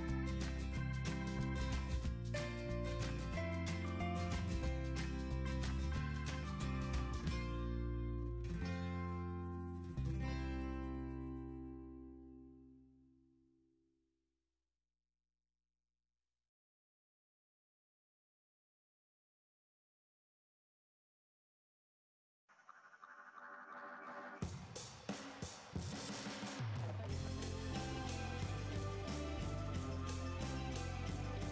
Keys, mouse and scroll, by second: 12.6 typing, 13.0 Return.